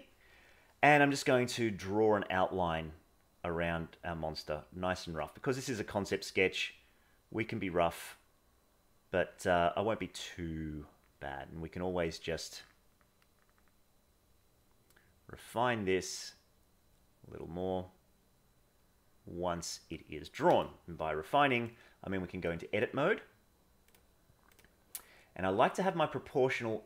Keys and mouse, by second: 1.4-19.6 drag, 21.2 middle click, 22.5 middle click, 23.9 click.